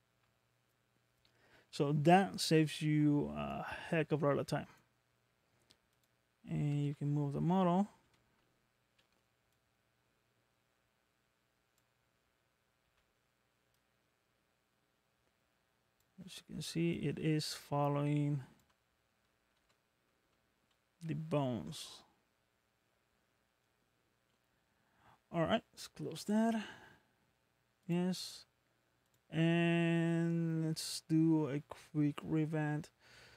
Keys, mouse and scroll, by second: 12.9 z, 29.0 click, 29.8 scroll down 1, 30.7 scroll down 2.